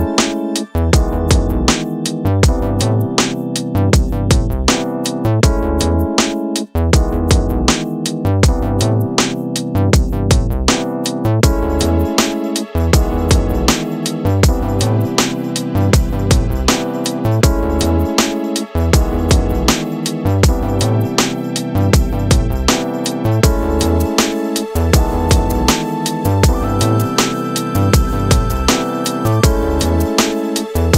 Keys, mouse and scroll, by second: 2.2-2.6 scroll up 1, 2.6-5.1 middle drag, 5.1 drag, 6.0 drag, 6.6-7.3 scroll down 10, 9.7-10.3 drag, 10.3 scroll down 2, 11.4-13.3 drag, 13.3-13.9 middle drag, 13.9-14.8 scroll up 2, 14.8-20.6 shift+middle drag, 20.6-21.6 drag, 21.6-23.4 scroll up 2, 23.4-26.4 drag, 27.1-30.1 drag.